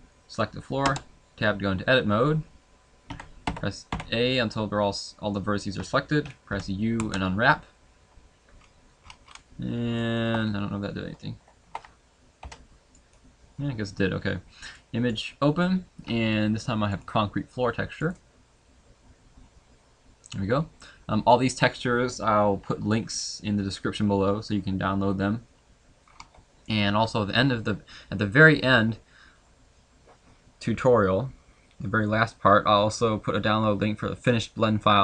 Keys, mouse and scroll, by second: 10.4 shift+middle click, 10.4 scroll down 2, 10.5-11.1 scroll down 2, 11.3 a, 11.6 a, 13.0 u, 19.4 click, 26.0-26.6 scroll up 1, 26.6 middle click, 26.6 scroll up 1.